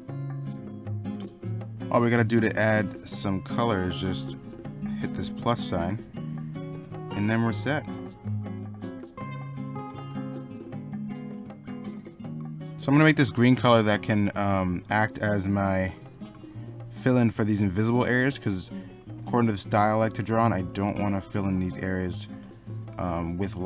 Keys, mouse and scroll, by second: 0.0 ctrl+z, 0.6 ctrl+z, 0.8 ctrl+z, 1.3 middle click, 1.4 Up, 1.5 middle click, 1.7 middle click, 5.8 middle click, 9.0 middle click, 9.1 p, 9.2 middle click, 9.7 Down, 9.8 Up, 9.9 scroll up 1, 10.0 middle click, 10.7-11.5 typing, 12.7 middle click, 14.3 Down, 14.6 Up, 16.0 scroll up 1, 17.5 middle click.